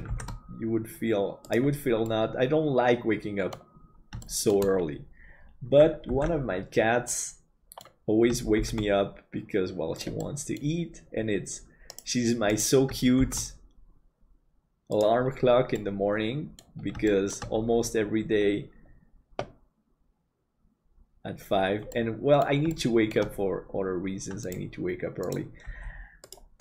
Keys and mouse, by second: 0.1 shift+d, 2.2-3.6 middle drag, 4.3 shift+middle click, 6.4 ctrl+s, 7.1 middle click, 8.6 shift+d, 10.3 middle click, 13.2 shift+d, 15.8-16.9 middle drag, 17.2 shift+middle click, 22.0 middle click, 22.8 shift+middle click.